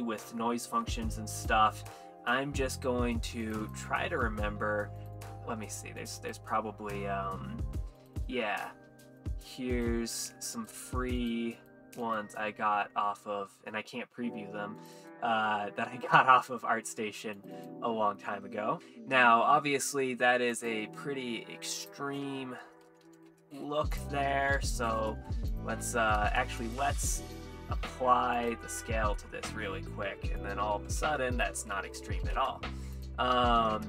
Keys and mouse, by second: 18.8 middle click, 20.5 click, 21.8-23.3 drag, 24.0-25.0 drag, 25.5 click, 26.6 click, 27.7 ctrl+a, 29.2 middle click, 30.4 click, 31.4-32.4 drag, 33.0 click.